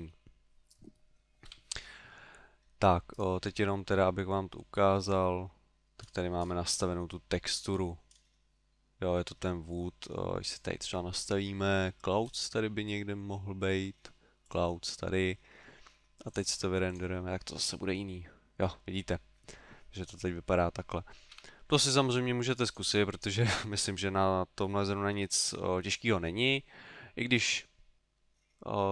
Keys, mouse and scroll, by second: 1.5 Escape, 3.2 right click, 5.0 click, 6.0-6.5 scroll up 2, 7.0-7.5 scroll up 2, 7.5 click, 8.1-8.5 scroll up 2, 10.5 click, 16.3 click, 21.3 Escape, 22.7 click.